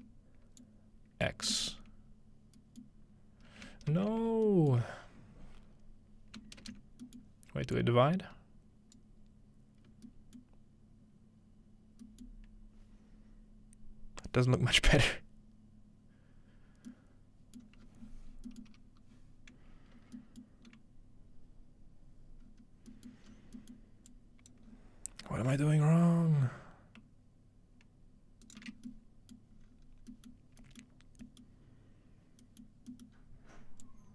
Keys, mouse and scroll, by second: 0.6-1.5 drag, 2.8-6.6 middle drag, 3.9 ctrl+space, 7.2-9.0 ctrl+middle drag, 7.8-11.3 ctrl+drag, 10.4-11.3 middle drag, 14.8-15.1 scroll down 3, 16.3-16.9 scroll up 2, 16.9-17.6 scroll up 1, 17.6-18.5 middle drag, 17.8-20.2 scroll down 3, 18.6-20.2 middle drag, 20.4-22.1 middle drag, 22.4-25.5 scroll up 3, 23.1 middle drag, 24.1-28.6 drag, 25.5-26.6 scroll up 1, 28.5 shift+right click, 28.7-29.6 scroll down 2, 29.6-29.9 scroll up 2, 30.3-32.4 scroll up 2, 32.4-33.8 scroll up 2, 33.8-34.1 drag.